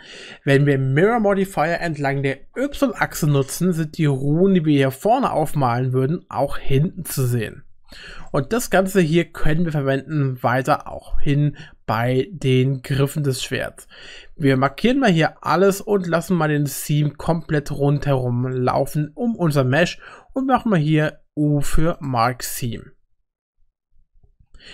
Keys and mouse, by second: 8.3 middle click, 9.2 shift+middle click, 10.1 middle click, 10.9 shift+middle click, 16.2-18.0 middle drag, 18.6 shift+middle click, 19.7 u.